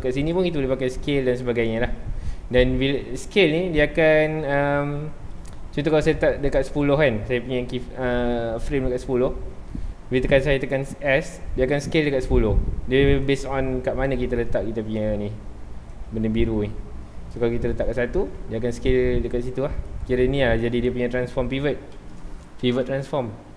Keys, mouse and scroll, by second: 0.2 s, 1.6 right click, 2.6-13.2 drag, 13.2 right click, 14.1-18.3 drag, 18.3 s, 20.0 right click, 22.7-23.2 shift+middle drag, 23.2-23.5 scroll down 1.